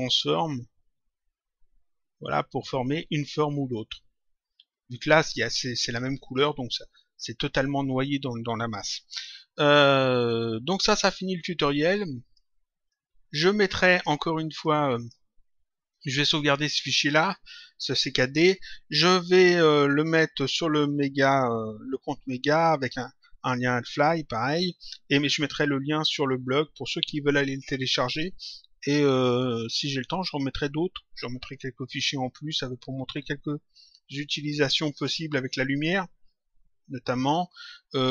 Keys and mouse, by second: 6.6 click, 10.9 click, 14.6 click.